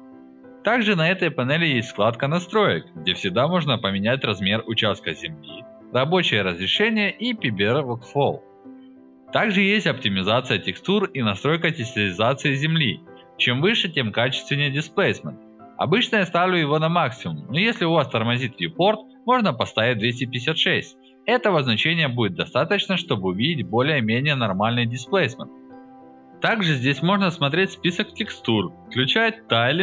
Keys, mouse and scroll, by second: 0.3 click, 2.2 click, 4.3 drag, 10.1 alt+middle click, 12.2 click, 17.7 click, 19.7-21.3 alt+middle drag, 21.8 click, 23.5 drag, 24.3 alt+middle click, 24.7-25.7 alt+drag, 26.0 click, 26.7 click, 28.4 click, 28.8 click, 29.1 click.